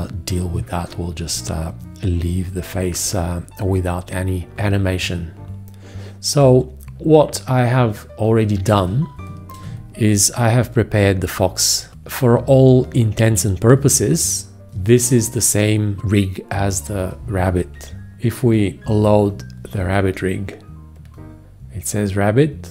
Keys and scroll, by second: 9.6 space.